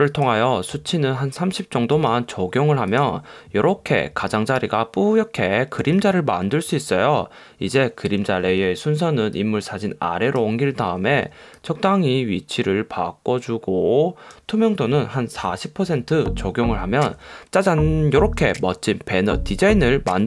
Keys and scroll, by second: 15.5 4.